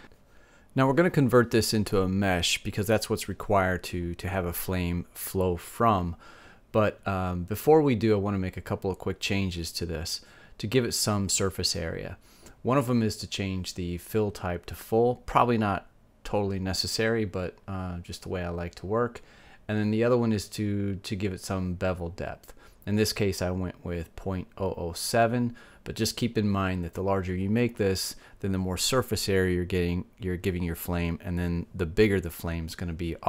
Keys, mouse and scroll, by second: 5.0-9.2 middle drag, 9.3 middle click, 9.8-11.5 drag, 15.4-17.2 drag, 18.0-23.0 middle drag, 26.0-27.9 drag, 30.8 KP_0, 32.7-33.2 middle drag.